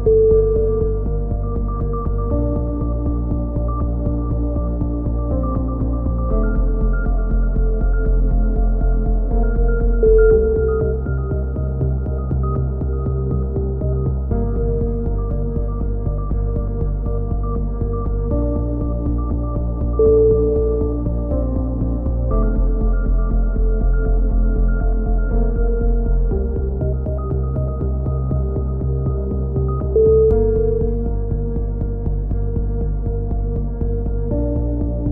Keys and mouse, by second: 0.7 click, 1.6 middle click, 2.8 click, 3.1 a, 3.3 z, 4.6 z, 5.2 z, 5.6 z, 6.5 right click, 7.3 middle click, 8.7-9.8 middle drag, 9.3 a, 10.5 k, 11.3 right click, 12.3-14.4 middle drag, 14.4 k, 17.0 right click, 18.1 ctrl+r, 20.7 a, 21.3 click, 21.8 right click, 22.1 middle click, 22.6 middle click, 22.6 right click, 22.7 middle click, 22.8 right click, 24.7-26.8 middle drag, 26.8 right click, 27.7 click, 30.3 a, 30.4-31.4 middle drag, 31.4 right click, 32.2 click, 32.3 click, 33.8 click, 34.3 a, 34.6 right click.